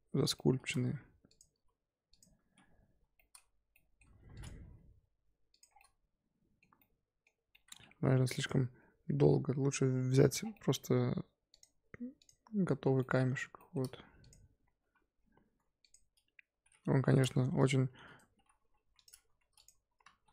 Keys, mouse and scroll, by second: 0.3 middle click, 0.8 1, 1.2 click, 2.1 shift+click, 3.0 j, 3.1-4.1 middle drag, 4.1 2, 4.3 click, 4.5 g, 5.7 scroll down 3, 5.7 middle click, 6.7 scroll up 1, 7.5 middle click, 7.8 Tab, 8.2 x, 10.1-10.5 scroll down 5, 10.5 middle click, 11.5 click, 13.0 middle drag, 13.2-14.2 scroll up 4, 13.5 shift+middle drag, 14.2 click, 15.0 scroll up 1, 15.1-15.5 scroll down 1, 15.5 Tab, 15.8 click, 16.9 l, 17.9 shift+d, 18.8 p, 19.2 Tab, 19.5 click, 20.1 ctrl+c.